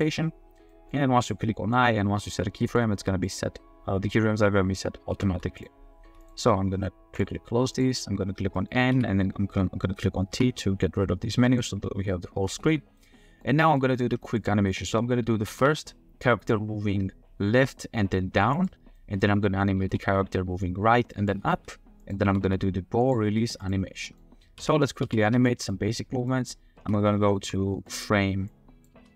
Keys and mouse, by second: 0.3 drag, 0.8 click, 1.2 click, 1.4 middle click, 2.6 middle click, 3.0 r, 5.1 r, 5.3 r, 6.1 r, 8.6 click, 8.9 n, 10.3 t, 11.4 click, 13.0-13.3 middle drag, 13.3 click, 13.8 click, 14.3 click, 14.7 drag, 15.4 r, 15.5 z, 18.0 click, 18.2 r, 18.9 drag, 19.7 r, 19.8 z, 21.5 r, 22.2 r, 22.4 r, 23.3 r, 24.0 click, 24.7 ctrl+z, 25.1 ctrl+z, 25.4 click, 26.4 click, 26.8 space, 27.3 space, 28.0 drag, 28.5-28.9 drag, 28.9 space.